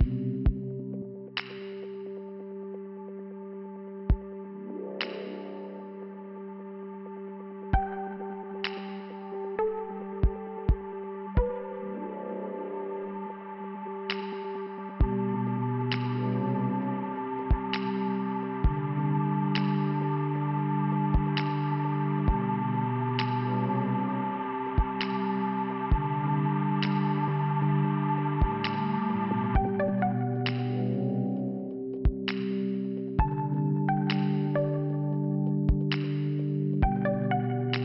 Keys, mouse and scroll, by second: 0.1 click, 4.1 click, 4.3 click, 5.5 click, 6.5 scroll down 2, 6.6 click, 7.6-7.9 scroll down 2, 8.6 click, 9.3 click, 9.6 click, 10.0 click, 10.6 click, 11.0 click, 11.3 click, 14.2 click, 15.9-16.4 scroll up 2, 17.0 click, 17.1 click, 17.6 click, 17.7 click, 19.3 click, 19.3 click, 21.2 click, 21.3 click, 21.9 click, 22.0 click, 23.0 click, 23.1 click, 24.8 click, 24.9 click, 26.8 click, 27.1 click, 27.9 right click, 28.0 right click, 29.5 click, 29.6 click, 31.8 click, 33.3 click, 33.4 click, 33.5 click, 37.6 click, 37.6 click.